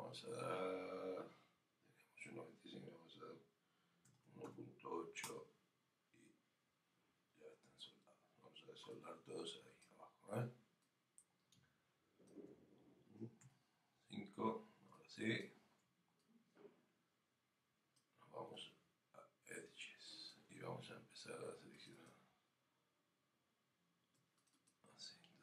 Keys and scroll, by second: 5.2 Return, 13.4 5.